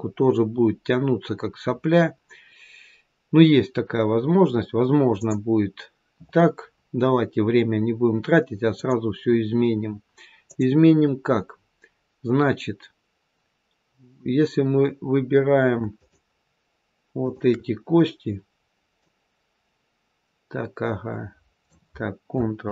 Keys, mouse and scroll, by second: 5.1 click, 9.6-10.3 scroll down 2, 10.3 click, 11.9-12.7 scroll down 1, 15.8 shift+click, 17.1 shift+click, 18.8 click, 22.5 ctrl+z.